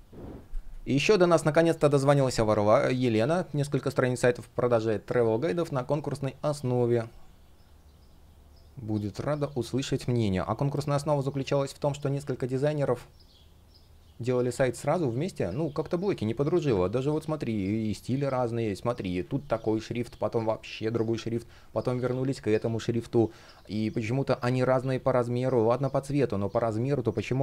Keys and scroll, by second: 0.4 space, 15.7 space, 19.0 shift+p, 21.1 super+z, 22.4 space, 24.2 super+z.